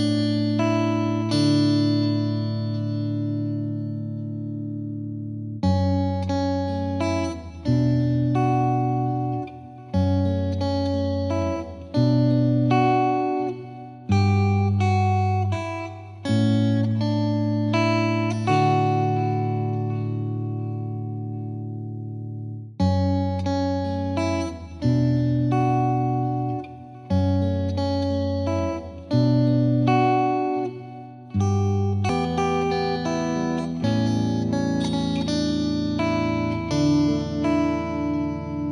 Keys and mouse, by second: 0.7-4.6 drag, 5.3-6.4 drag, 8.4-9.5 drag, 10.7 F2, 11.8 click, 16.8 click, 18.3 click, 20.2-21.4 drag, 25.8-28.0 drag, 33.9-36.1 drag, 37.1 click.